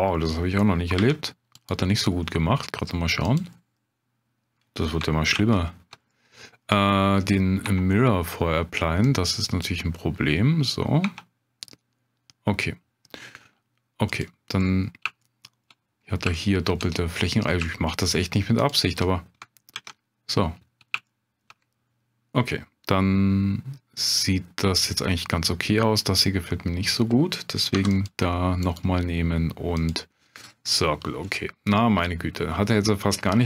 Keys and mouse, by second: 1.0 2, 5.4 ctrl+z, 6.1 click, 7.8 Tab, 9.0-10.5 drag, 11.0 Tab, 14.2 click, 14.7 middle click, 15.2 shift+click, 16.4 shift+click, 18.0 shift+click, 18.6 shift+click, 19.7 ctrl+x, 21.1 shift+click, 27.7 3, 28.0 click, 31.3 middle click.